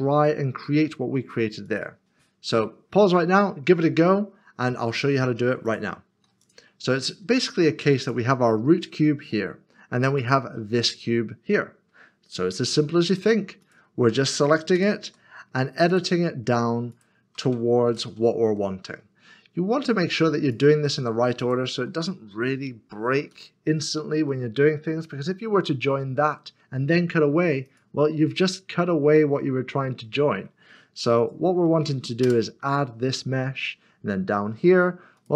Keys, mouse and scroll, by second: 0.0 scroll down 1, 2.5 click, 2.7 middle click, 5.6 middle click, 6.5 click, 9.3 middle click, 10.2 click, 13.6 shift+click, 14.8 ctrl+-, 15.9 click, 16.9 shift+click, 17.9 ctrl+KP_Subtract, 18.8 middle click, 20.5 click, 21.4 shift+click, 23.3 ctrl+KP_Subtract, 24.5 middle click, 27.6 middle click, 27.8 click, 31.2 shift+click, 32.2 ctrl+KP_Add, 33.4 middle click, 33.6 scroll down 1, 34.5-35.0 scroll up 1, 35.2 click.